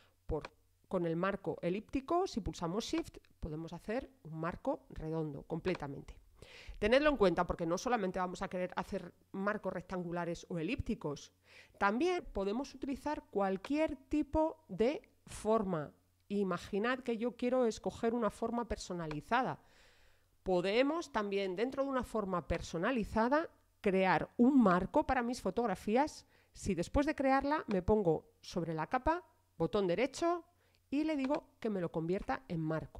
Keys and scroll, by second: 6.7 shift+BackSpace.